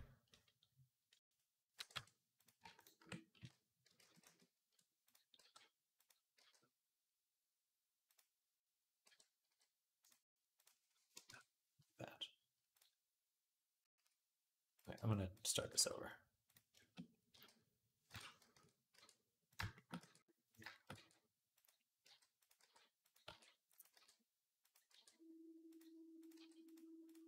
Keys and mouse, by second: 1.1 click, 1.2-2.6 middle drag, 1.6 e, 2.6 click, 2.9 middle click, 3.2 z, 3.7 ctrl+click, 3.8 ctrl+z, 4.1 ctrl+z, 4.5-9.9 middle drag, 5.2 g, 6.2 g, 8.9 n, 9.3 n, 9.9 click, 10.0 middle click, 10.5-12.6 drag, 12.6-19.4 middle drag, 13.9 a, 14.8 b, 15.4 x, 17.1 g, 18.8 e, 19.8 e, 20.8 e, 21.9-24.7 typing, 26.2-27.2 typing.